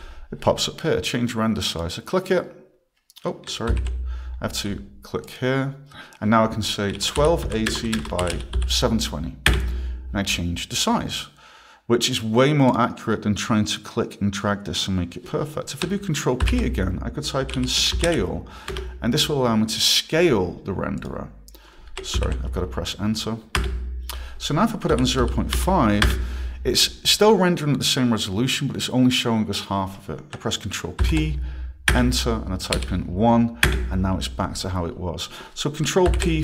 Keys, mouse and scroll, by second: 1.7 click, 3.7 ctrl+p, 5.2 click, 6.6-9.1 typing, 9.5 Return, 12.7 click, 16.4 ctrl+p, 17.2-18.7 typing, 21.0 click, 22.1 ctrl+p, 23.6 Return, 24.7-26.0 typing, 26.1 Return, 31.0 ctrl+p, 31.9 Return, 32.7 1, 34.2 Return, 36.1 p.